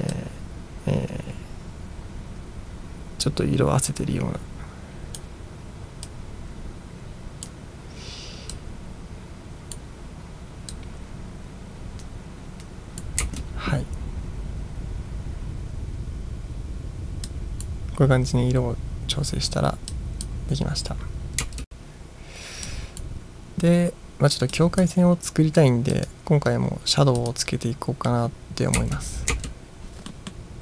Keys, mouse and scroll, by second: 0.2-5.2 drag, 6.1-7.5 drag, 8.6-9.8 drag, 10.8-13.1 drag, 13.3 space, 17.3-17.7 drag, 20.0-20.4 drag, 21.5 space, 22.7-23.1 drag, 24.5-24.9 drag, 26.0 click, 27.2 click, 28.8 space, 29.4 space, 30.1 middle drag.